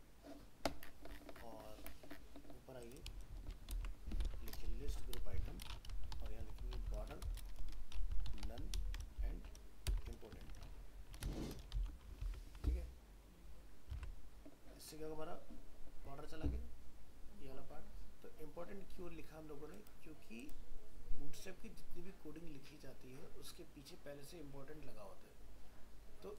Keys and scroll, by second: 3.7 ctrl+v, 12.2 ctrl+s, 14.0 alt+Tab.